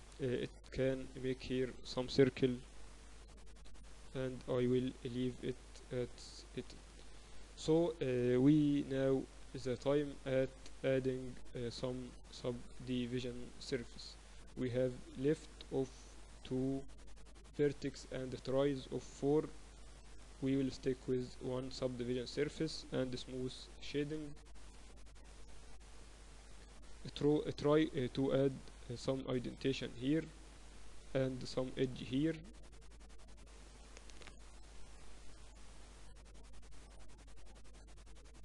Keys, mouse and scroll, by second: 0.2 KP_7, 0.4 z, 2.5 a, 3.4 b, 4.8-6.8 drag, 7.5 Tab, 8.5-10.4 middle drag, 8.9 Tab, 9.6 ctrl+2, 10.0-11.6 typing, 14.1 Tab, 21.3-23.1 drag, 23.1 middle click, 24.0 t, 24.9-26.6 drag, 25.2 t, 26.6 middle click, 27.8 Tab, 28.5-30.4 middle drag, 29.2 ctrl+r, 32.0 ctrl+r, 34.2 Tab.